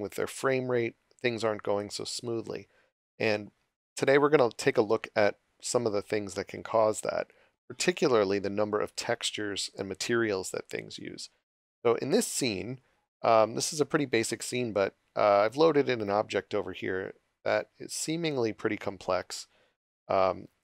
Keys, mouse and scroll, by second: 12.3 click.